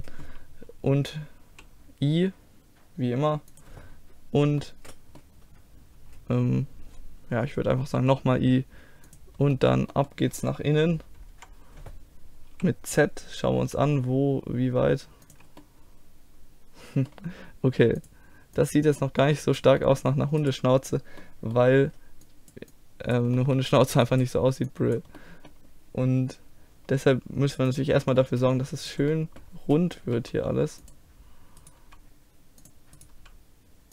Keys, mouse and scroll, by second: 1.5 i, 4.6-7.7 middle drag, 7.8 i, 9.5-11.9 middle drag, 11.3 KP_1, 12.6 z, 13.6 g, 15.6-17.7 middle drag, 18.0-19.0 drag, 19.0 middle click, 20.4-22.0 right drag, 22.0 click, 22.3 middle click, 23.1 click, 23.4 middle click, 23.7-27.7 drag, 28.0 click, 28.8-30.2 right drag, 29.1 click, 29.3 click, 30.2 g, 31.6-32.7 drag, 31.8 g, 33.1 g.